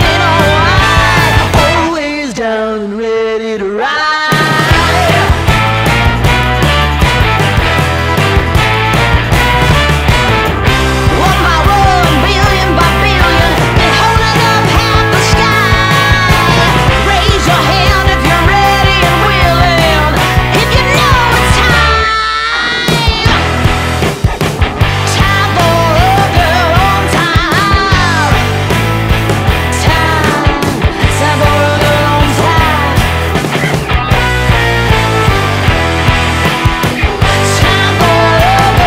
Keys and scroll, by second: 1.3 F2, 19.7 space, 24.4 space, 24.8 F3, 25.5 Escape, 35.4 space, 36.0 Escape, 36.4 F2.